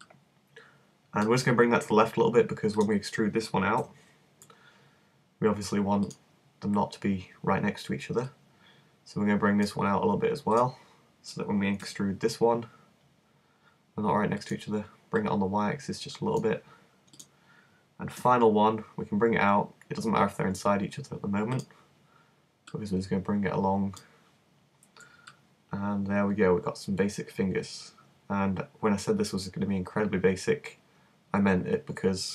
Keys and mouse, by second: 2.9 right click, 3.8 e, 6.2-7.9 drag, 7.9 middle click, 8.2-10.2 drag, 10.5-11.8 right drag, 11.8-14.4 drag, 11.8 e, 14.5 click, 16.8 click, 17.2-18.2 right drag, 18.2 e, 21.6-24.0 drag, 25.3-27.7 middle drag.